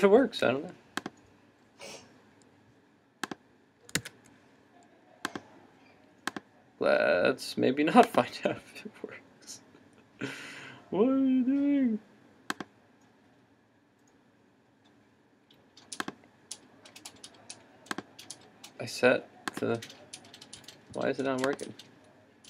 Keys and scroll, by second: 4.0 super+s.